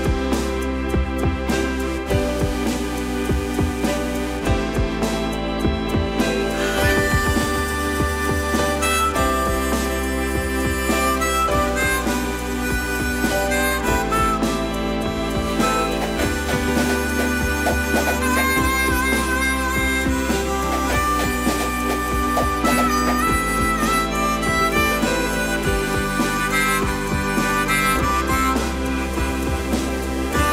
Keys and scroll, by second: 5.2 m, 8.7 space, 17.1 shift+Escape, 17.6 space, 25.1-26.9 typing, 26.2 Return, 26.5 Return, 26.9 Escape, 29.2 m.